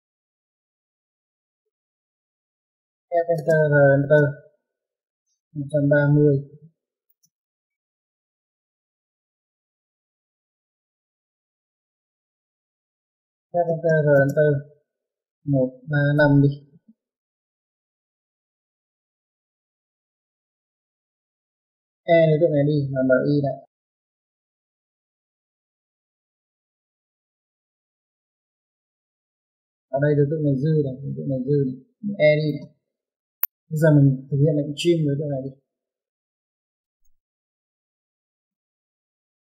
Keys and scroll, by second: 0.0-0.5 typing, 2.1-3.6 typing, 7.8 Escape, 10.0-10.7 typing, 12.0-13.2 typing, 15.7 Escape, 18.6 typing, 20.3-21.0 typing, 24.7 space, 28.9 typing, 33.3 typing, 34.9 space.